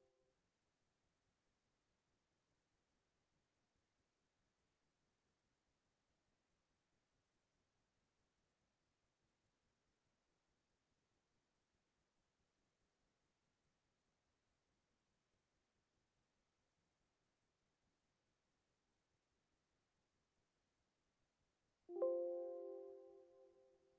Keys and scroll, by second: 8.0 ctrl+z.